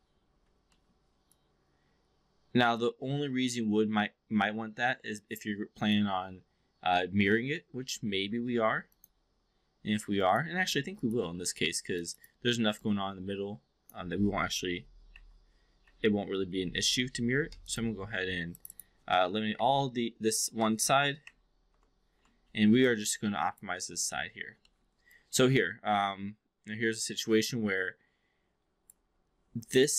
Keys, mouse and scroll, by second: 0.7 alt+middle drag, 0.9-1.3 alt+scroll down 1, 1.3-6.0 alt+drag, 7.7 ctrl+z, 8.9 click, 9.3 4, 10.3 click, 10.9 click, 11.9 click, 12.2 click, 12.7-13.9 alt+drag, 15.0 Delete, 15.7 Delete, 16.8 Delete, 18.5 click, 18.7 click, 19.5 Up, 20.0 Up, 20.1 Up, 21.1 Delete, 22.7-23.6 alt+drag, 24.1 alt+middle drag, 24.7 alt+middle click, 25.1-28.9 alt+drag, 29.7 click.